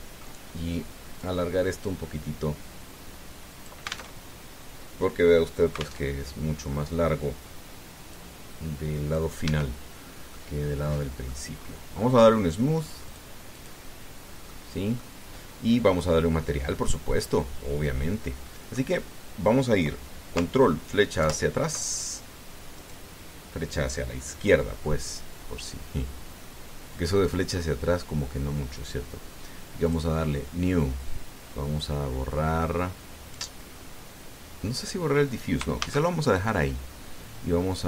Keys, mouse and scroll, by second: 0.6 click, 2.0-4.6 drag, 5.0 alt+Tab, 6.8 alt+Tab, 8.9-10.1 drag, 10.2 Tab, 10.7-11.1 scroll down 1, 11.1-12.2 drag, 12.3-12.6 scroll up 1, 13.8 click, 14.3 click, 15.1 scroll down 1, 15.3 click, 22.0 ctrl+Left, 23.5 right click, 25.5-26.0 scroll down 1, 26.6-27.2 scroll down 4, 27.2 click, 28.2-28.7 scroll up 2, 29.2 scroll up 2, 30.6 click, 31.9 click, 36.6 shift+a.